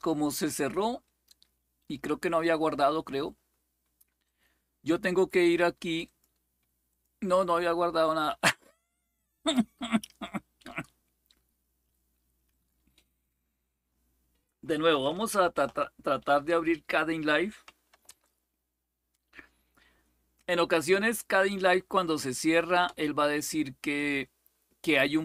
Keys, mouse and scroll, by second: 0.0 click, 4.0 click, 5.8 click, 6.4-9.3 drag, 12.2 click, 15.1 alt+super+d, 17.4-18.3 typing, 22.6 Return.